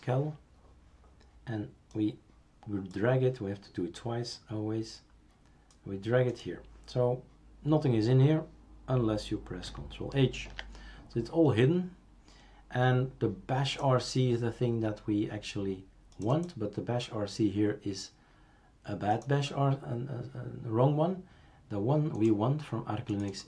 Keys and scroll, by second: 0.0-0.1 typing, 10.4 ctrl+h.